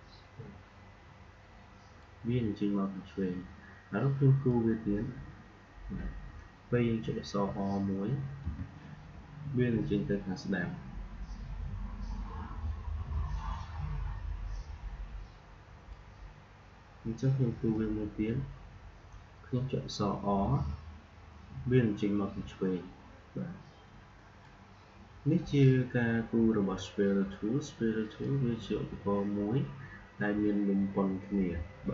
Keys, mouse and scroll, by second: 4.4-8.3 drag, 8.3 r, 17.6-20.3 drag, 20.3 r, 28.1-31.9 drag.